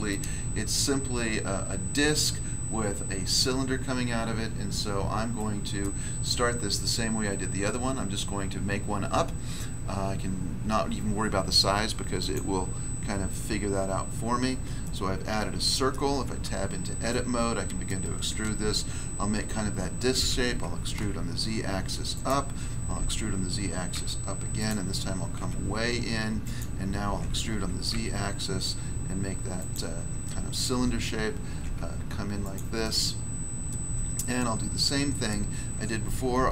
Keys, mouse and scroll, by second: 0.4 scroll up 1, 4.0 scroll down 1, 5.3 middle click, 5.8 middle click, 12.1 click, 12.3 click, 14.8 middle click, 15.9 middle click, 16.4 Tab, 17.8 middle click, 20.1 e, 20.9 z, 22.1 click, 22.2 click, 22.9 e, 23.9 z, 24.5 click, 24.6 click, 25.3 s, 26.4 click, 26.5 click, 27.1 e, 27.9 z, 29.5 click, 29.7 click, 31.5 s, 32.4 click, 32.5 click, 32.8 middle click, 33.6 middle click, 36.3 e.